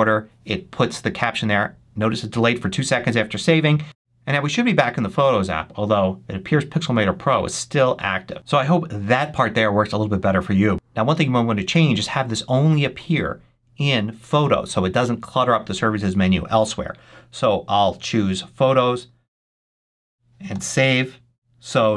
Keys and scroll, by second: 20.4 super+s.